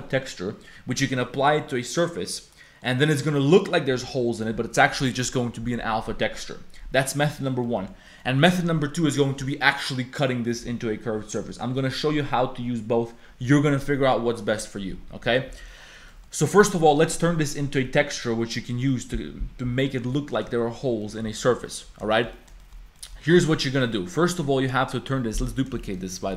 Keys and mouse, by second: 2.5 click, 7.6 click, 8.2 click, 15.1 Tab, 15.2 click, 15.7 Tab, 15.7 click, 16.1 click, 16.7 click, 18.9 click, 21.0 click, 21.6 click, 22.1 shift+click, 22.3 click, 22.6 shift+click, 23.0 click, 23.4 click, 25.3 Tab, 25.7 shift+d, 26.1 g.